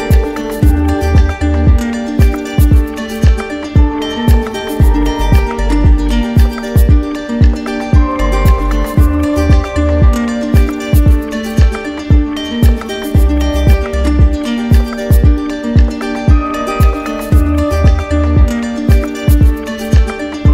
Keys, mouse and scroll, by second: 0.0 alt+click, 1.3 alt+click, 2.2 click, 3.2 alt+click, 3.9 click, 5.2 alt+click, 7.4-8.4 drag, 8.7 z, 9.6 click, 12.1 alt+click, 13.2 click, 13.9 click, 14.9 click, 15.7 click, 16.0 shift+click, 16.2 shift+click, 16.6 click, 17.0 click, 17.4 alt+click, 17.9 click, 18.6 alt+click, 19.1 click.